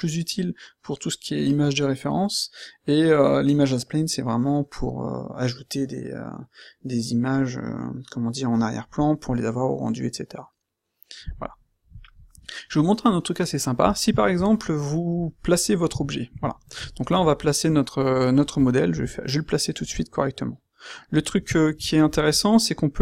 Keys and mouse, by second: 15.8 q, 18.9 g.